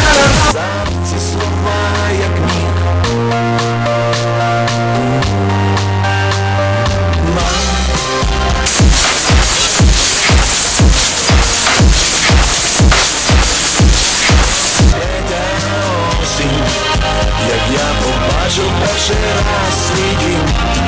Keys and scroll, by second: 0.9 Page_Down, 14.9 Page_Down.